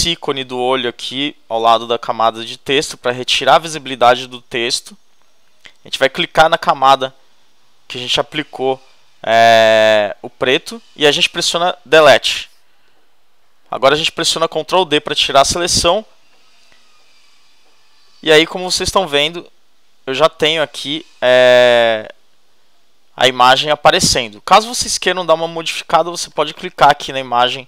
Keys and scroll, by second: 12.1 shift+BackSpace, 14.9 shift+super+d.